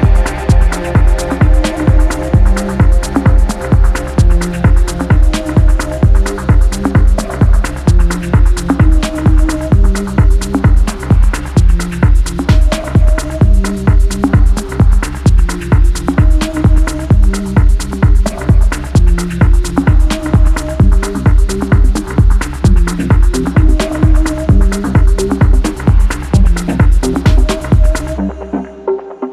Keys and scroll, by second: 0.0-0.9 typing, 3.8 ctrl+z, 6.8 x, 14.3 4, 21.2-22.4 typing, 23.6-25.4 typing, 27.0-29.3 typing.